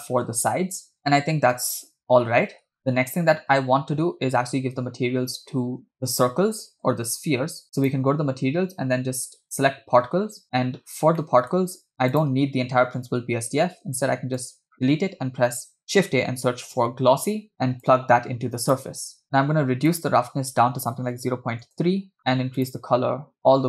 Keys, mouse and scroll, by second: 0.3 space, 2.8 space, 3.5 scroll down 3, 7.8 click, 9.5 click, 10.5 scroll down 4, 11.0 scroll up 3, 11.2 middle click, 12.1 click, 13.4 x, 13.9 shift+a, 17.0 s, 18.0 click, 19.2 scroll up 2, 19.9-21.8 drag, 23.1 click.